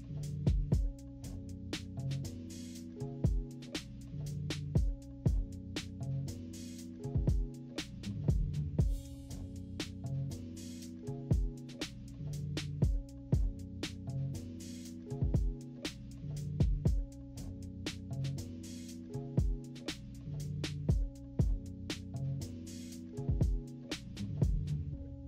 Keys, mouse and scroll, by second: 0.4 -, 0.9 =, 1.4 =, 1.8 click, 3.2 -, 3.6 -, 3.8 =, 3.9 scroll down 2, 3.9 =, 4.7 click, 5.3 click, 6.0 -, 6.2 scroll up 1, 6.4 =, 6.5-7.0 scroll down 2, 7.1 click, 8.5 -, 9.0 =, 9.1 scroll up 2, 9.3 =, 9.6 =, 10.1 click, 11.0 click, 12.1 -, 12.6 =, 12.9 =, 13.1 =, 13.2 scroll down 2, 13.6 click, 15.3 -, 15.8 -, 16.1 =, 16.3 scroll down 2, 16.3 =, 17.2 click, 17.9 click, 18.1 click, 18.2 click, 18.4 click, 18.7 click, 19.2 click, 19.5 click, 19.8 click, 20.0 click, 20.2 click, 20.4 click, 20.4 right click, 20.9 -, 21.2 scroll up 1, 21.4 =, 21.6 -, 21.8 =, 22.4 scroll up 2, 22.9 click, 23.1 click, 23.3 click, 23.6 click, 23.9 =, 24.0-24.5 scroll up 3, 24.1 =, 24.7 click, 25.1 click.